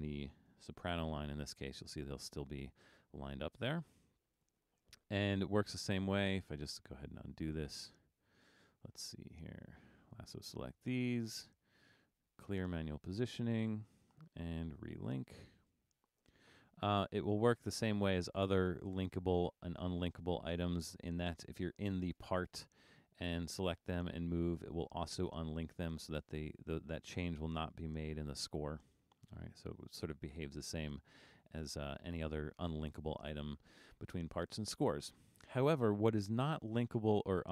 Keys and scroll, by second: 0.9 super+=, 1.2 super+=, 29.8 super+z.